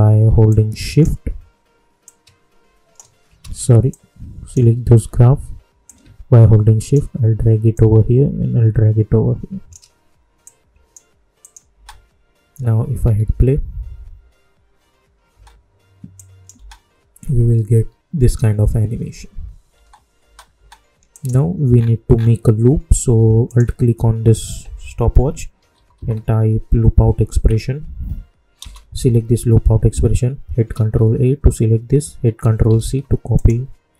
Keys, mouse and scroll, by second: 0.4-3.3 drag, 3.3 ctrl+z, 3.8-7.7 drag, 7.7-10.4 drag, 10.4 click, 11.7 space, 13.0 -, 15.2 typing, 16.1 click, 16.5 space, 19.6 space, 21.1 click, 21.7-23.0 scroll down 1, 23.4 alt+click, 25.5 l, 27.4 Down, 28.5 Return, 30.6 ctrl+a, 32.6 ctrl+c, 33.3 click.